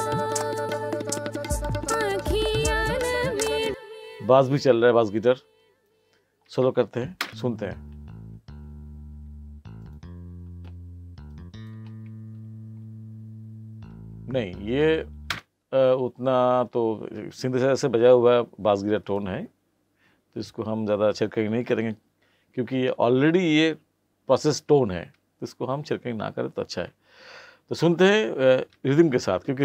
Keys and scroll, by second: 3.7 space, 7.2 space, 15.3 space.